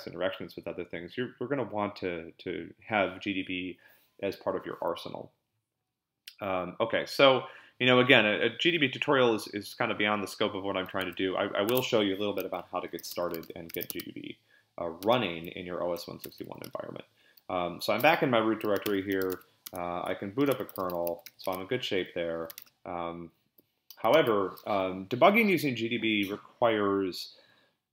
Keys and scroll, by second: 11.0 Tab, 12.7-14.2 typing, 15.0 Return, 15.7-16.9 typing, 18.5-22.5 typing, 22.6 Return, 24.1 ctrl+l.